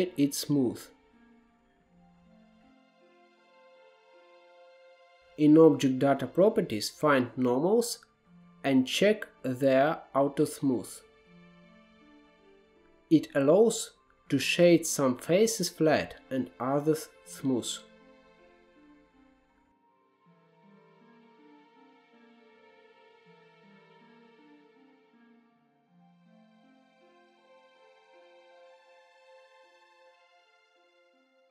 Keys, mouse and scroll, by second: 0.0-0.7 scroll up 4, 0.7 scroll down 2, 1.0-1.6 shift+middle drag, 1.6-2.9 scroll down 2, 2.9 scroll up 1, 3.2-3.9 middle drag, 3.2-3.6 scroll down 2, 3.9-9.5 right drag, 4.8 scroll down 2, 5.1-8.0 middle drag, 10.9-11.7 drag, 11.7-12.7 scroll down 2, 12.7-13.2 drag, 13.2-14.3 scroll down 1, 14.3-14.7 scroll down 1, 14.7 click, 15.6-16.3 scroll up 2, 16.3-17.3 scroll up 2, 17.3-20.0 shift+middle drag, 20.0-22.3 drag, 22.3-22.8 scroll down 1, 22.8-24.7 middle drag, 24.7-25.1 scroll down 1, 25.1 shift+middle click, 25.6-25.9 scroll down 1, 25.9 KP_Divide, 26.3 click, 26.8 KP_Decimal, 27.0 scroll up 4, 27.3-27.6 shift+middle drag, 27.8-28.6 scroll down 4, 27.8 middle drag, 28.6-29.3 drag, 29.5-30.5 scroll up 6, 29.8 shift+middle drag, 30.1 shift+middle click, 30.8 click.